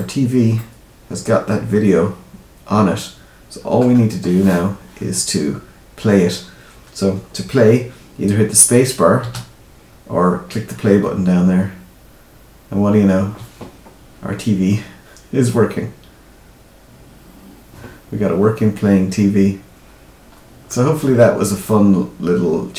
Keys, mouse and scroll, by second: 0.5 middle click, 3.8-4.7 scroll down 1, 9.1 space, 19.8-20.6 scroll up 3, 20.6 middle click.